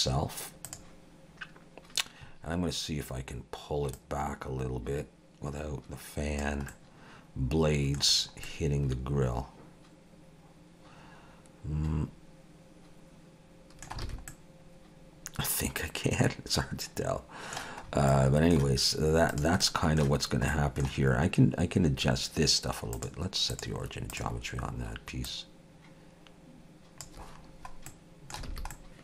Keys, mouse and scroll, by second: 4.0 click, 6.7 middle click, 8.1-8.6 scroll down 4, 8.5 middle click, 14.0 alt+a, 14.3 middle click, 17.9 scroll up 3, 18.1 middle click, 19.3 click, 19.6 middle click, 20.5 middle click, 22.9 click, 25.3 click, 27.9 middle click, 28.5 alt+a, 28.7 middle click.